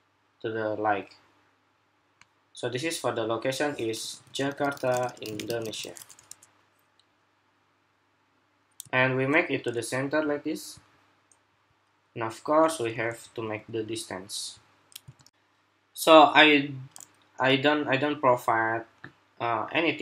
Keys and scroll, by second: 6.0 Escape, 15.0 shift+super+2.